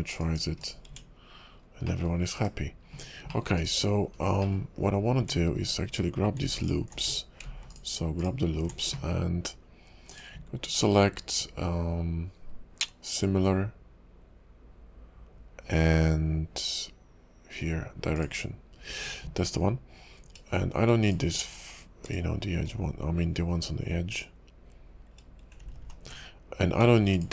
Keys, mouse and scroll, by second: 0.2 click, 0.6 click, 0.9 Tab, 1.2 scroll down 1, 1.5 scroll up 2, 1.9 middle click, 2.3 /, 3.0-3.3 scroll up 2, 3.3 middle click, 3.6 /, 4.0 scroll up 2, 4.4 middle click, 5.2 Tab, 5.6-6.4 scroll up 1, 6.6 alt+click, 7.0 Tab, 7.7 alt+click, 8.2 alt+click, 10.1 click, 21.0 alt+shift+click, 22.0 alt+shift+click, 25.6 ctrl+z, 25.8 ctrl+z, 27.1 alt+shift+click.